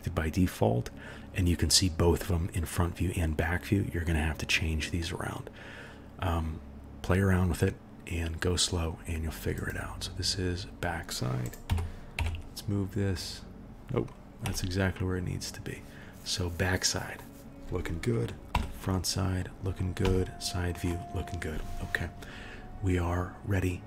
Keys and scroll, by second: 11.7 g, 18.5 KP_1, 20.0 KP_3.